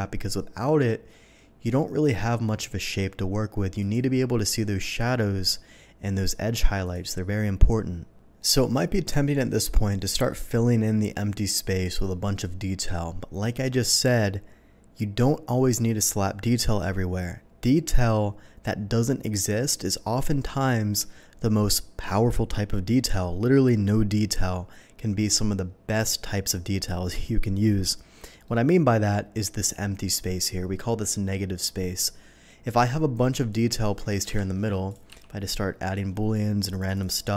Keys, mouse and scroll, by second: 1.1-2.9 middle drag, 3.7 click, 4.8 click, 6.8 click, 8.3-9.3 middle drag, 10.0 click, 25.3 typing, 28.4-29.0 middle drag, 34.2 KP_7, 34.8 click, 35.0 d, 35.9-36.3 drag, 36.6 click, 36.8 click.